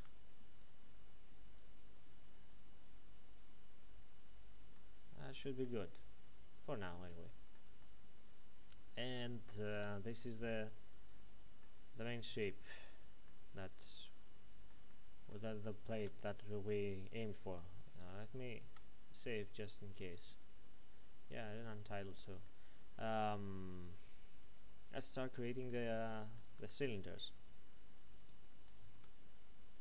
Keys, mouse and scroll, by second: 2.8 click, 4.7 middle click, 6.5-6.9 scroll up 1, 7.1 shift+middle click, 9.2-9.7 scroll down 1, 9.7 Tab, 10.2 middle click, 11.9-12.4 scroll up 1, 12.4-12.7 scroll down 1, 14.9 shift+middle click, 18.1 ctrl+s, 21.3 click, 22.4 middle click, 26.4 Tab, 28.2 right click, 28.8 ctrl+Tab, 29.2 click, 29.7 right click.